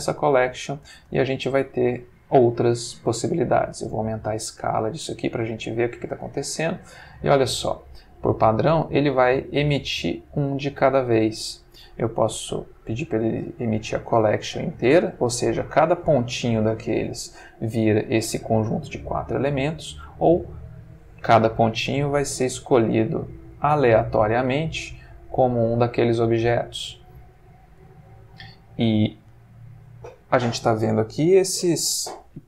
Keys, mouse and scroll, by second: 1.0 space, 1.5-2.3 middle drag, 3.7-6.4 drag, 7.0-7.8 middle drag, 12.6 click, 16.9 click, 23.6 click, 25.1-26.1 middle drag, 26.4-27.1 middle drag, 27.3-28.6 ctrl+middle drag.